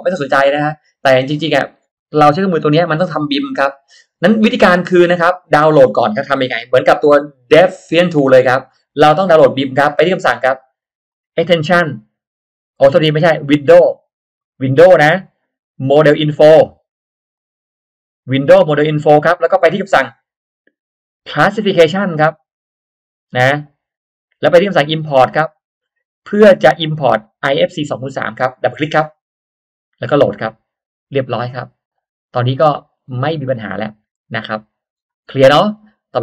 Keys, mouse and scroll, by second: 11.1 click, 17.3 click, 25.5 click, 28.6 click, 31.9 click, 32.7-33.0 scroll down 1, 33.0 middle click, 33.5 scroll down 1, 34.1-34.7 scroll up 1, 34.9-35.5 scroll down 1.